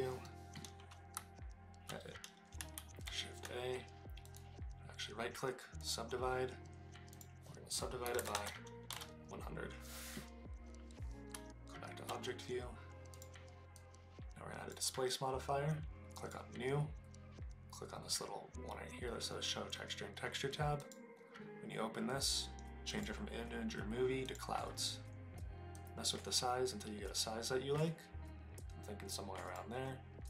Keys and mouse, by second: 0.2 middle drag, 1.1 Tab, 2.8 shift+a, 4.2 click, 7.1-8.3 drag, 8.3 KP_0, 11.3 Tab, 13.1 click, 13.9-14.7 drag, 22.9-24.4 drag, 25.9-29.6 drag.